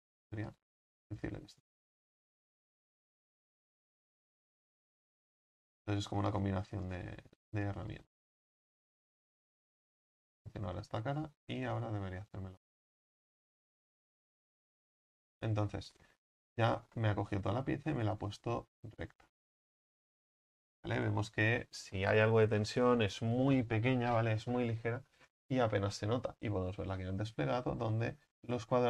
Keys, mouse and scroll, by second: 0.3 s, 1.2-2.3 right drag, 2.3 s, 3.7 right click, 4.8 s, 5.4 scroll up 3, 6.2 right click, 8.0 s, 8.5-9.4 scroll down 4, 10.1-11.8 right drag, 11.8 click, 12.3-14.4 right drag, 14.4 w, 14.7-16.5 scroll down 2, 14.8 w, 16.5-26.3 scroll down 1, 26.3 middle click, 26.7 scroll down 1, 26.8 Tab, 27.2-27.8 middle drag, 27.8-28.7 scroll up 4, 28.7-28.8 scroll up 1.